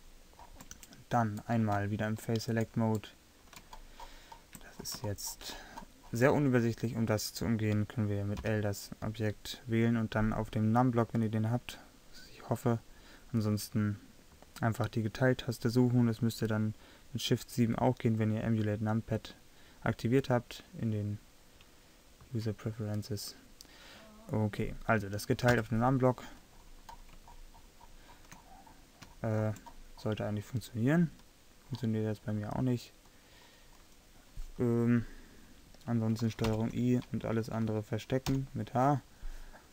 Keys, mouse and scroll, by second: 4.9-8.5 middle drag, 8.5 l, 25.6 KP_Divide, 29.1-31.8 middle drag, 36.6 ctrl+i, 38.4 h.